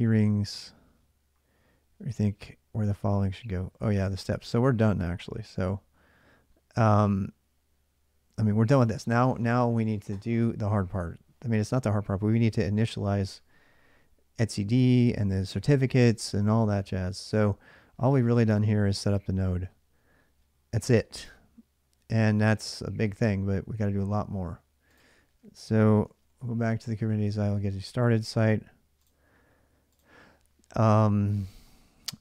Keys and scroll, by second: 25.6-26.7 typing, 26.7 Return.